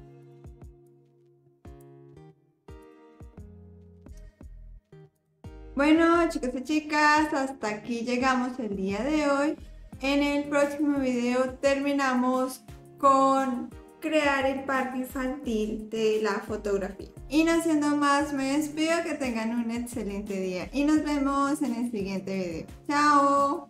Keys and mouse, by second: 0.2 click, 0.9 click, 2.9 click, 5.2 click.